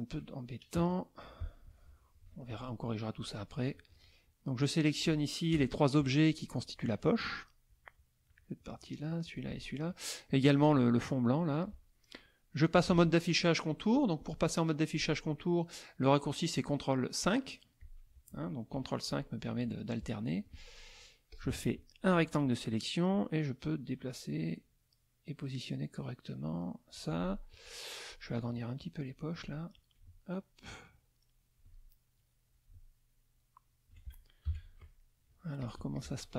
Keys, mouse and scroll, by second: 0.8 KP_Add, 1.4 click, 2.2 F2, 2.4 click, 3.9 shift+click, 4.6 shift+click, 5.5 KP_Add, 6.0 middle click, 7.2 click, 7.7 click, 8.7 shift+click, 9.2 shift+click, 10.3 shift+click, 11.0 shift+middle click, 13.9 click, 17.8 click, 18.7 ctrl+KP_5, 21.3 click, 23.1-27.1 drag, 27.5 click, 28.8 alt+click, 29.7-31.8 alt+drag, 32.5-34.0 alt+drag, 35.0 ctrl+KP_5, 35.0 ctrl+middle click, 35.6 click, 35.8 z, 35.9 click.